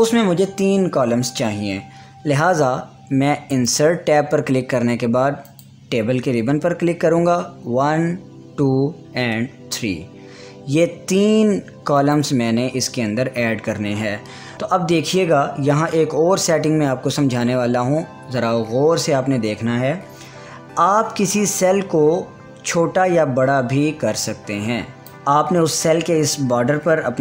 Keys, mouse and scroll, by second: 4.0 Return, 4.2 click, 12.6 click, 14.7 ctrl+Tab, 14.9 ctrl+z, 22.1-25.1 drag.